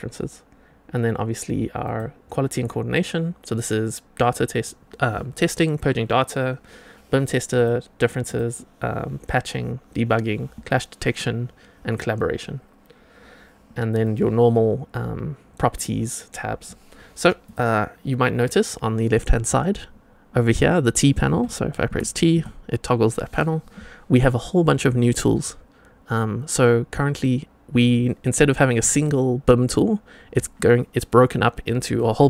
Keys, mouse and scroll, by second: 1.8 click, 7.5 click, 8.2 drag, 13.9 click, 17.4 click, 21.8 t, 22.2 t.